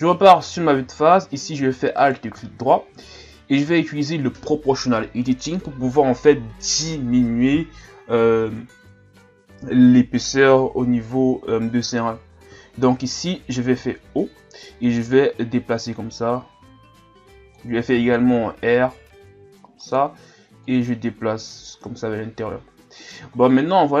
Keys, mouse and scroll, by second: 0.9-2.0 ctrl+scroll up 2, 2.0-5.0 alt+right drag, 13.7 o, 14.3-15.1 scroll up 2, 15.1-17.9 drag, 17.9 r, 20.6-23.4 drag, 23.4-24.0 scroll down 1.